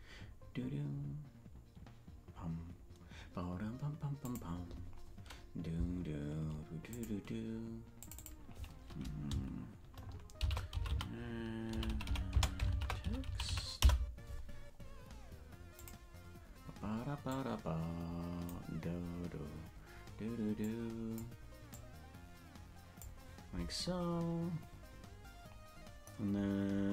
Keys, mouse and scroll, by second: 4.1 click, 6.8 click, 8.0 click, 13.1-14.3 drag, 15.7 click.